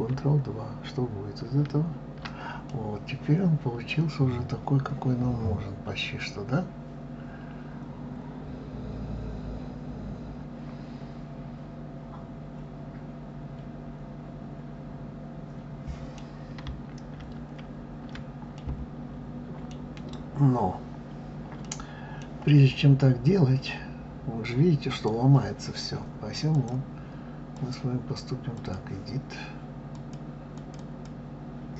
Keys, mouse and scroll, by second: 1.5 ctrl+2, 2.7-5.7 middle drag, 17.4 ctrl+z, 18.5-21.6 middle drag, 22.7-24.6 scroll up 2, 24.9 click, 26.5 click, 27.5-30.1 drag, 30.5 click, 30.8 click.